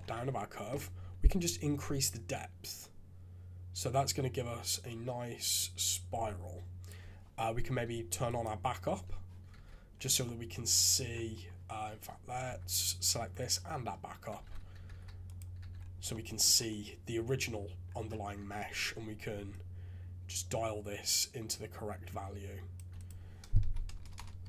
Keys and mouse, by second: 1.5-6.9 shift+middle drag, 8.2 click, 9.5 shift+z, 10.2 click, 12.5 Tab, 13.4 ctrl+click, 14.4 alt+a, 14.9 shift+z, 15.3 click, 15.6 shift+z, 16.1 click, 19.7-22.9 shift+middle drag, 22.9-24.4 middle drag, 24.0 BackSpace, 24.1 BackSpace.